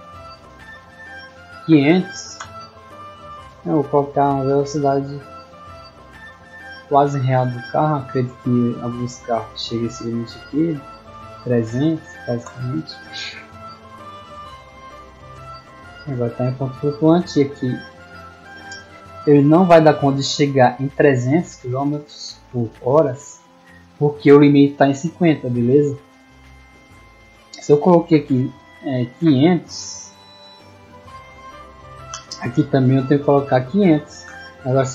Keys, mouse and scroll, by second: 4.3 click, 5.0 click, 9.1 click, 10.6 middle click, 11.7 middle click, 13.0 w, 29.1 click, 30.7 click.